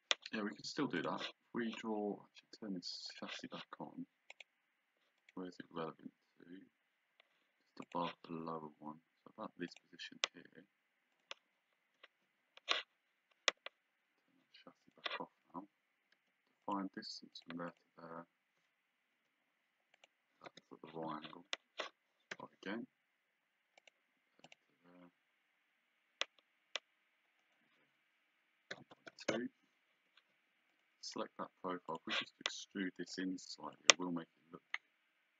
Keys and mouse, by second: 1.0 click, 3.1 click, 4.3 click, 7.9 click, 9.7 click, 11.1 click, 11.8 Escape, 14.8 click, 16.2 d, 16.7 click, 19.1 Escape, 19.9 click, 20.5 Delete, 22.3 d, 23.8 click, 27.4 click, 28.7 KP_1, 29.3 KP_Enter, 29.9 Escape, 30.7 click, 31.0 right click, 31.9 click, 33.1 click, 34.7 click.